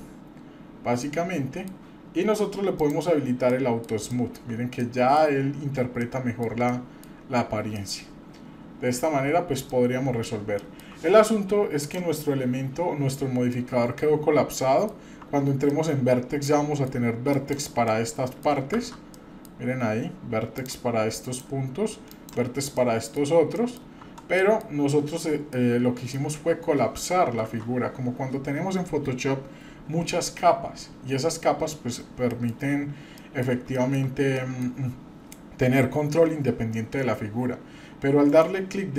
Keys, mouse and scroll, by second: 0.2-0.8 scroll down 2, 1.0 middle click, 2.8 click, 3.5-3.8 middle drag, 4.1-4.5 shift+middle drag, 4.8 middle click, 5.3-6.0 scroll up 2, 6.0-6.5 middle drag, 6.7-7.1 shift+middle drag, 7.7-8.9 middle drag, 9.3-9.8 scroll down 2, 9.7-10.2 middle drag, 10.6-10.9 shift+middle drag, 11.8 click, 13.3 scroll down 1, 13.5-14.9 middle drag, 15.3 Tab, 15.7-16.9 middle drag, 17.3 click, 17.9 middle click, 18.8 shift+z, 19.1 middle click, 21.1 click, 22.1 click, 22.7 middle click, 23.2-23.5 scroll down 1, 23.5 middle click, 24.0 Tab, 24.4 middle click, 25.5-26.1 middle drag, 26.3 scroll up 1, 27.4 shift+z, 32.3 middle click, 32.6-33.2 scroll up 2, 33.2 middle click, 33.7 shift+middle click, 34.0 scroll down 1, 34.3 middle click, 38.3-38.9 right drag.